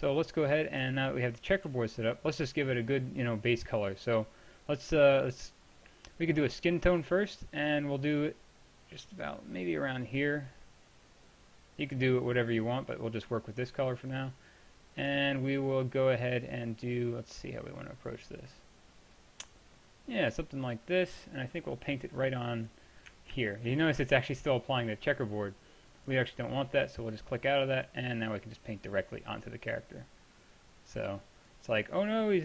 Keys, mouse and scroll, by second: 0.9 t, 1.7 t, 7.1-16.1 drag, 20.1-21.4 drag, 21.6-22.3 middle drag, 22.4 drag, 23.4 ctrl+z, 23.4 click, 26.1-26.9 drag, 27.2 middle click, 27.3-27.9 drag, 28.5-30.2 drag, 31.8-32.4 middle drag.